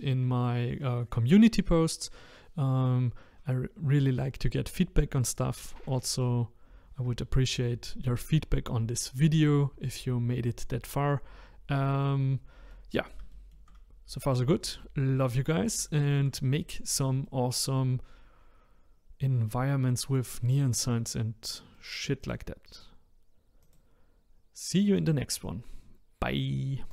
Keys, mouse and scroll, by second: 13.8-14.3 scroll up 1, 14.3-14.8 scroll down 1, 14.8-20.2 middle drag, 20.2 click, 20.6-26.9 middle drag.